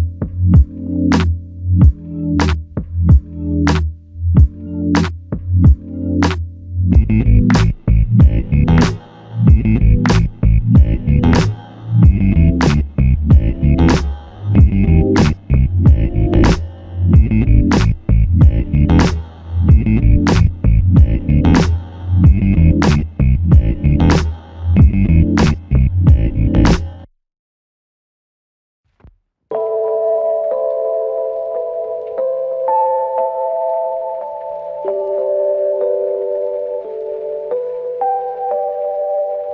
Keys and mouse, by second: 2.0 shift+click, 3.5-4.2 typing, 4.5 shift+click, 5.4 shift+click, 9.5 alt+click, 12.8-14.1 typing, 15.9 double click, 16.7 shift+click, 23.5 shift+click, 28.3 alt+click, 30.5-31.8 typing, 36.7 typing.